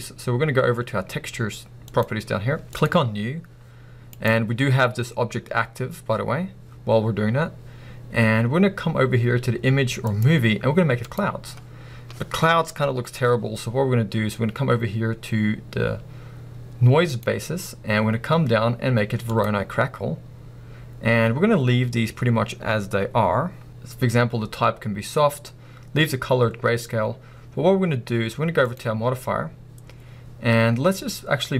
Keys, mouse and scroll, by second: 5.5 right click, 11.1 click, 19.4-31.5 drag.